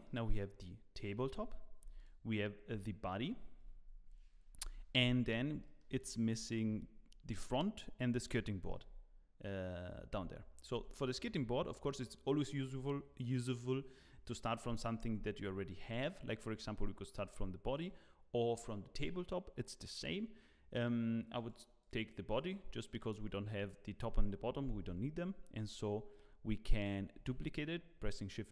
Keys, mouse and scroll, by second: 0.2 click, 1.1 g, 1.9 click, 2.7 g, 3.8-4.6 scroll down 1, 4.6 KP_1, 5.2 scroll up 3, 5.6 shift+middle click, 6.3 z, 6.6 scroll up 2, 8.4 shift+middle click, 9.3-9.7 scroll up 1, 10.1 Tab, 10.7 Tab, 11.3 scroll down 2, 17.7 click, 21.3 click, 21.8 click, 23.1 click, 27.1 shift+d.